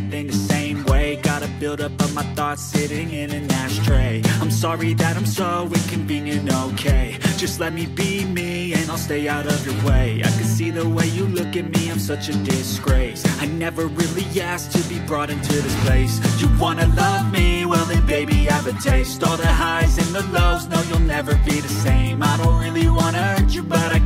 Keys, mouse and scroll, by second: 1.9 s, 2.0 g, 5.1 z, 5.2 z, 7.2 right click, 9.3 shift+right click, 11.4 ctrl+p, 16.0 ctrl+Tab, 17.3 Tab, 18.3 right click, 19.8 ctrl+Tab, 21.2 right click, 22.8 g.